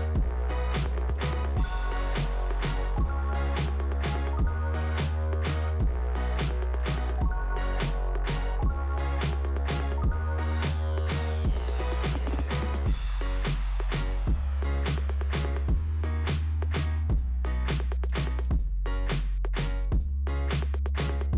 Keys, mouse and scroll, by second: 1.1 click, 1.9 click, 2.0 click, 4.7 click, 11.9 click, 14.6 click, 16.5 scroll up 2, 19.4 click.